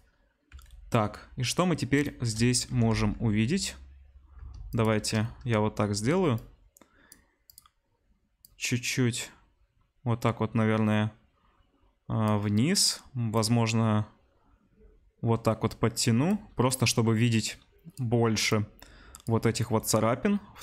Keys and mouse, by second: 2.7 r, 3.0 z, 4.7 ctrl+shift+click, 6.3-7.5 drag, 13.4-20.6 drag.